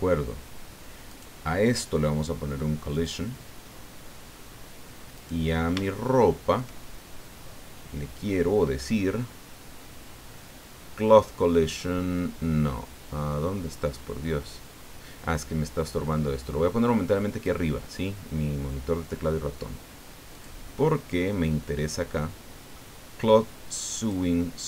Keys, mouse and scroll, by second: 0.1-0.4 scroll down 1, 1.1 right click, 2.9 click, 5.2 right click, 5.8 shift+click, 7.4-8.4 scroll down 4, 14.5-17.6 drag, 20.3 click, 20.7-21.2 scroll down 1, 24.0 click.